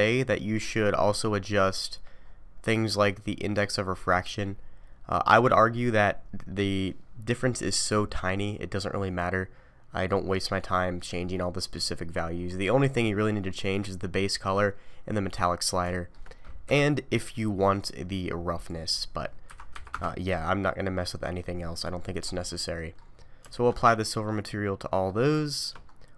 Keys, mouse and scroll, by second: 0.6 scroll down 4, 1.8-3.4 scroll down 9, 12.1-12.9 scroll up 6, 13.0-14.0 scroll up 3, 14.5-15.3 scroll down 2, 15.6 scroll up 1, 15.9 shift+middle click, 16.7 KP_Decimal, 17.8 click, 18.8 click, 20.7-21.1 scroll down 4, 21.1 middle click, 21.9-22.8 scroll down 10, 22.8 middle click, 23.1 scroll down 2, 23.5 alt+a, 24.0 middle click, 25.4 shift+middle click, 25.9 scroll up 3.